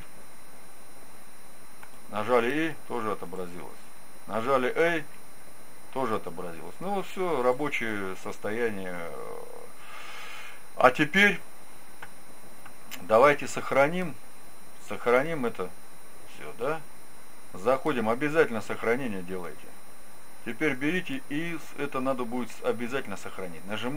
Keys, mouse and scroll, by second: 2.3 e, 3.3 click, 5.0 a, 7.5-9.4 drag, 8.5-10.4 middle drag, 20.5-22.3 drag.